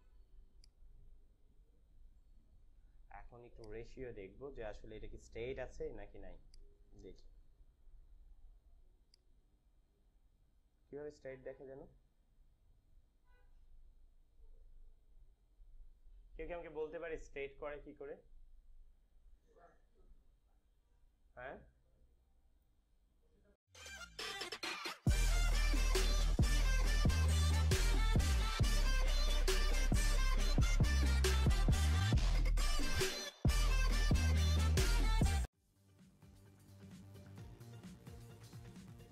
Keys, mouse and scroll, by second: 2.0 Return, 2.7 ctrl+=, 3.2 space, 3.5 click, 3.8 space, 7.4 click, 9.0 click.